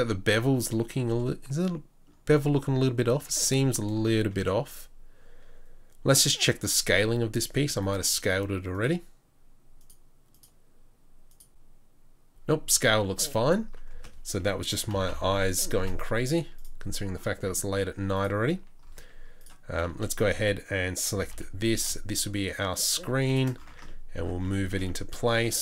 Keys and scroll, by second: 3.2 Tab, 6.6 n, 13.9 space, 15.2 o, 17.3 Tab, 18.3 Tab, 19.0 Tab, 19.9 3, 21.1 g, 23.7 Tab.